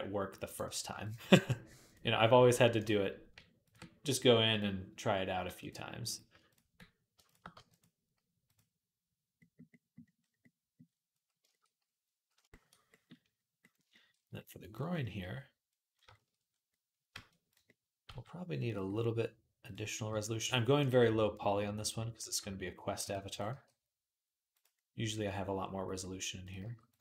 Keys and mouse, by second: 0.8 ctrl+click, 0.9 ctrl+middle click, 1.0-2.6 drag, 2.6 middle click, 3.4 ctrl+click, 3.5 ctrl+middle click, 4.3-5.5 drag, 5.3 g, 5.5 middle click, 5.9 click, 6.1 ctrl+middle click, 7.0 click, 7.1-8.3 middle drag, 7.3 g, 8.3-17.3 drag, 17.3-23.1 middle drag, 17.9 g, 19.5 click, 19.9 g, 22.1 g, 23.1 click, 23.2-27.0 middle drag, 23.3 g, 26.4 g.